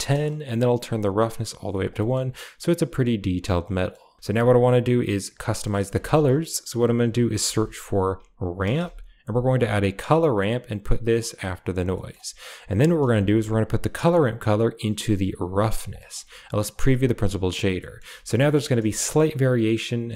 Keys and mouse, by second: 0.9 click, 2.0 middle click, 3.7 middle click, 4.2 g, 5.5 middle click, 6.0 shift+a, 11.4 click, 11.8 middle drag, 12.4 drag, 12.6 g, 13.0 a, 13.4 click, 14.2-15.5 drag, 15.9 click, 16.6 ctrl+shift+click, 16.9 click, 17.8 middle drag, 18.1 shift+middle click, 18.4 middle drag.